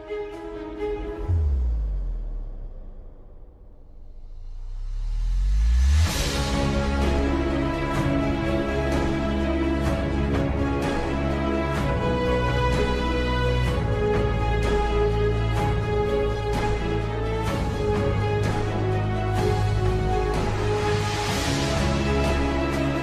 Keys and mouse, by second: 2.2 s, 4.8 ctrl+click, 6.4 ctrl+z, 11.5 g, 14.9 s, 21.1 s.